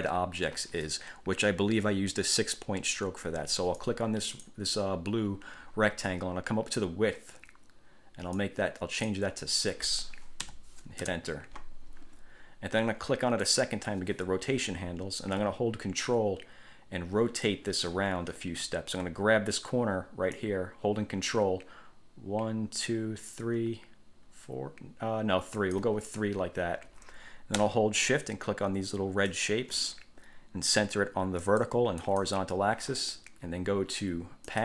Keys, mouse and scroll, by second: 4.0-4.8 drag, 8.5-9.4 drag, 10.6 6, 11.2 Return, 13.6 click, 20.6-26.2 ctrl+drag, 29.5 shift+click, 31.6 click, 32.2 click.